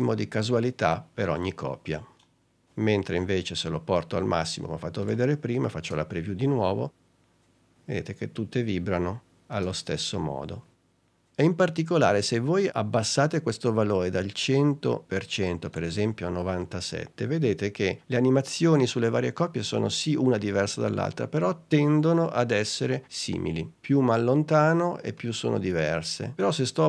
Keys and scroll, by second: 0.0 space, 6.0 space, 9.6 space, 18.8 space.